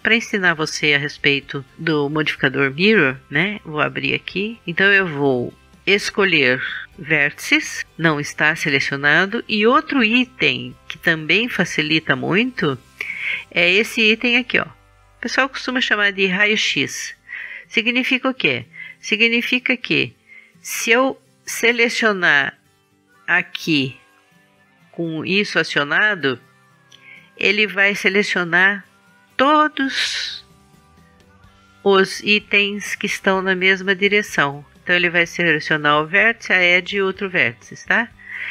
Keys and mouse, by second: 4.5 click, 6.7 click, 7.0 click, 8.0-15.5 middle drag, 17.4-29.8 middle drag, 34.3-38.5 middle drag.